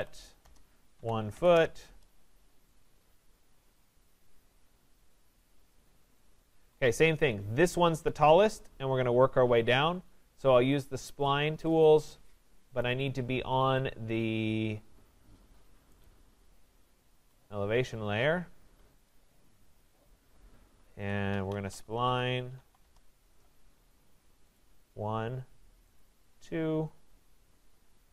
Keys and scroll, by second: 6.5 Escape, 17.1 Escape, 22.8 Return.